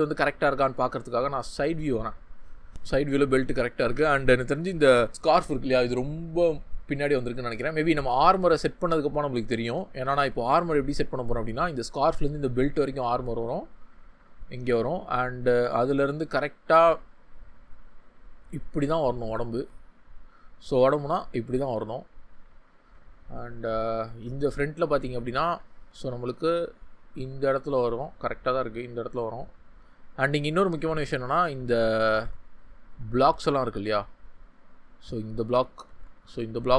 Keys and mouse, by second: 3.9 Tab, 9.6 ctrl+z, 19.5 ctrl+z, 32.1 ctrl+z, 35.8 ctrl+z.